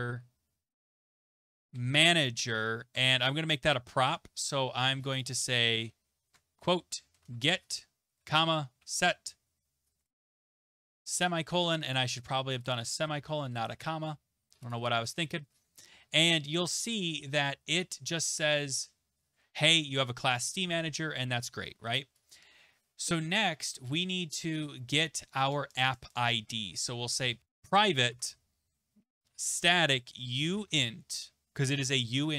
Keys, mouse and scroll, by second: 1.0-11.0 typing, 5.2 click, 11.9 click, 12.6 Delete, 12.8-13.7 typing, 14.7 click, 15.1 click, 22.3 click, 24.5 Return, 26.7-31.1 typing, 28.1 Tab.